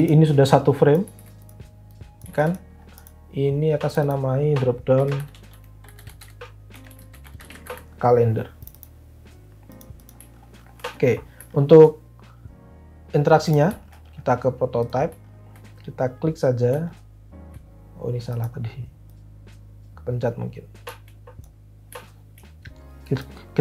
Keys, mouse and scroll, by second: 1.1 ctrl+z, 2.3 ctrl+z, 4.7-8.1 typing.